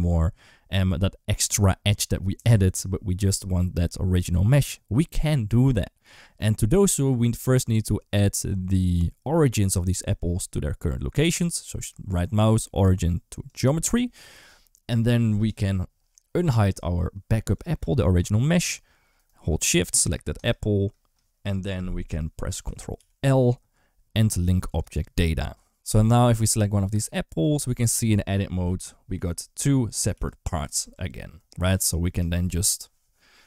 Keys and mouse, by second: 11.8-13.4 right drag, 17.4 click, 20.2 shift+click, 22.8 ctrl+l, 27.4 Tab, 29.0 l, 29.7 click, 30.0 l, 30.6 Tab.